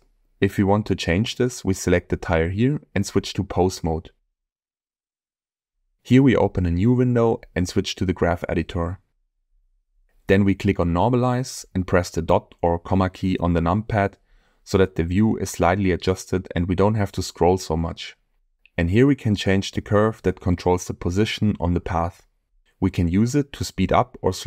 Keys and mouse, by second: 2.6-3.5 drag, 4.7 click, 7.6-8.4 drag, 8.8 click, 11.4 click, 12.5 KP_Decimal, 14.2 click, 16.1 click, 18.4-19.4 shift+middle drag.